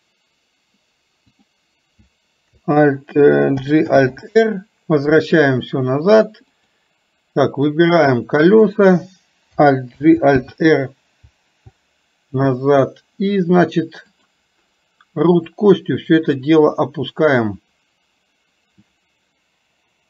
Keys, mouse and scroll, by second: 1.4 click, 6.7 click, 7.7-8.8 drag, 14.2 click, 15.8-17.5 drag.